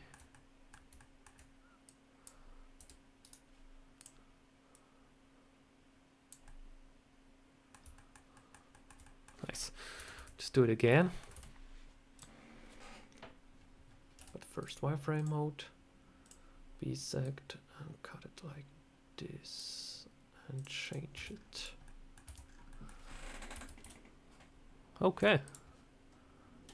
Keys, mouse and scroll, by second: 0.2 middle click, 0.9 shift+middle click, 1.7 click, 2.7 r, 3.8 click, 4.6 click, 6.3 middle click, 7.8 shift+middle click, 8.2 middle click, 8.6 middle click, 8.9 middle click, 9.8 KP_7, 10.0 Tab, 10.8 shift+middle click, 11.2 a, 12.0 click, 14.0 z, 15.0 click, 20.4 click, 20.7 click, 21.0 Tab, 21.1 scroll down 2, 21.4 click, 21.7 middle click, 22.1 Tab, 22.3 scroll down 4, 22.5 middle click, 23.4 Tab, 23.7 KP_7, 25.1 z.